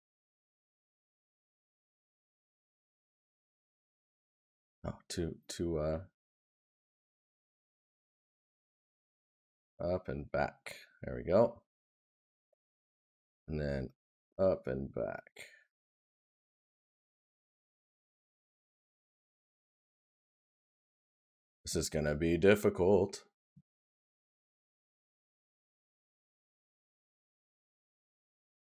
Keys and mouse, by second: 20.5 right click, 23.2 right click, 25.3 right click.